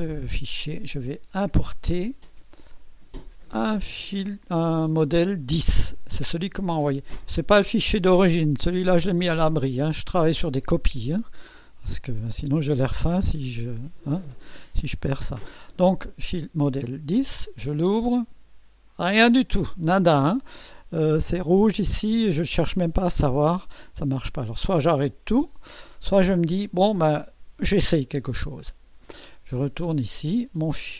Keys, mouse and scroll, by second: 1.0 click, 2.7 click, 14.4 click, 17.4 click, 28.9 click.